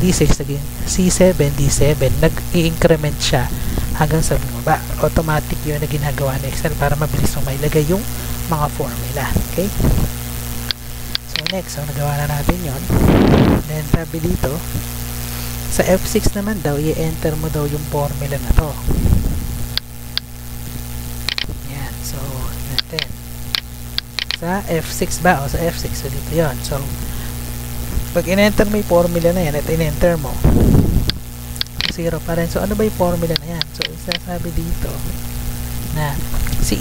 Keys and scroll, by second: 0.3 Down, 2.0 Left, 2.5 Right, 2.8 Down, 21.6 ctrl+c, 24.6 Tab, 27.6 F2, 28.1 ctrl+v, 30.5 Return, 34.8 Escape, 35.2 F2.